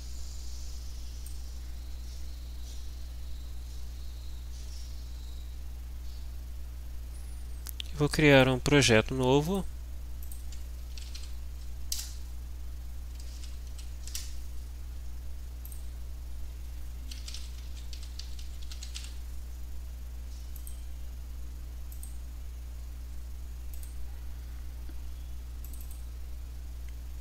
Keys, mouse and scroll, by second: 8.3 click, 9.5 click, 10.3 click, 10.7-11.7 typing, 11.9 Return, 13.4 g, 13.7 o, 14.1 Return, 15.7 click, 16.9-19.5 typing, 20.5 click, 21.9 click, 23.7 click, 25.7 click.